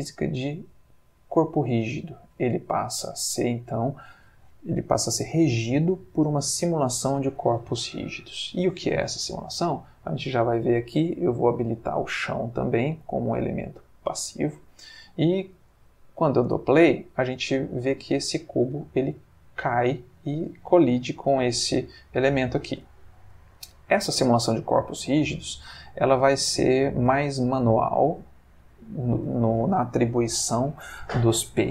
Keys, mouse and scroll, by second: 1.2 click, 9.2 click, 11.5 click, 13.0-14.3 drag, 14.9 middle click, 15.5-16.5 scroll up 1, 16.5 space, 17.8-18.6 middle drag, 18.8-19.9 middle drag, 20.1-20.8 middle drag, 21.5-22.6 middle drag, 22.4 Escape, 23.0-23.9 ctrl+middle drag, 24.2 ctrl+click, 26.6-28.1 ctrl+middle drag, 28.5 shift+middle click.